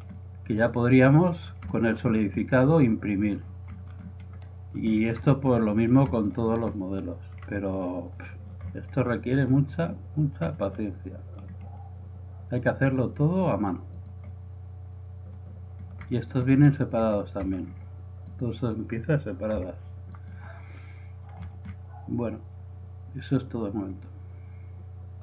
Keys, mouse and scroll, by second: 0.7-12.5 middle drag, 12.9-13.9 middle drag, 14.2-15.6 right drag, 15.7-17.0 middle drag, 17.0 z, 17.4 middle click, 17.4 z, 18.3-19.5 drag, 19.7 g, 20.7 middle click.